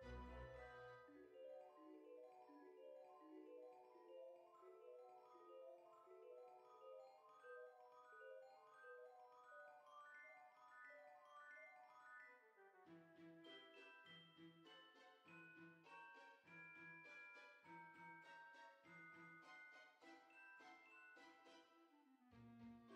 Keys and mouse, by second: 2.5 click, 4.1 click, 4.5 g, 6.2 click, 7.5 g, 9.3 click, 10.6 click, 11.0 g, 12.2 click, 15.1 middle click, 16.6 shift+middle click, 20.2 middle click, 21.8 e.